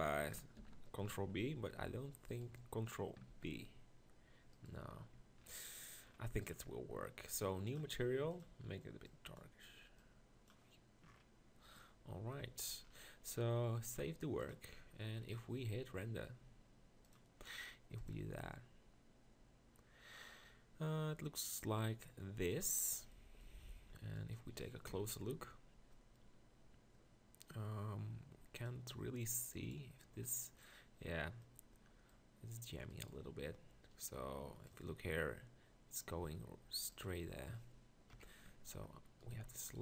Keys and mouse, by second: 0.6 ctrl+l, 1.9 b, 3.3 ctrl+b, 5.1 Tab, 11.1 middle click, 25.0 ctrl+KP_Decimal, 38.1 KP_1, 38.5 Tab, 39.4 z.